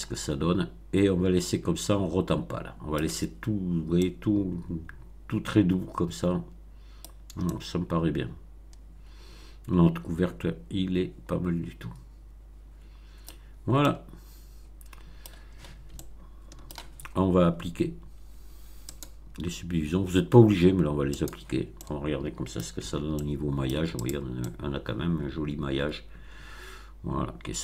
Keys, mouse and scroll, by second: 3.9-7.1 middle drag, 7.1 scroll down 1, 7.4-13.3 middle drag, 13.3-13.6 scroll down 1, 13.8-15.3 middle drag, 15.9-16.8 shift+middle drag, 18.8 click, 21.1 click, 21.7-22.7 middle drag, 22.8 Tab, 23.1 middle click, 24.0 click, 24.3-27.6 middle drag.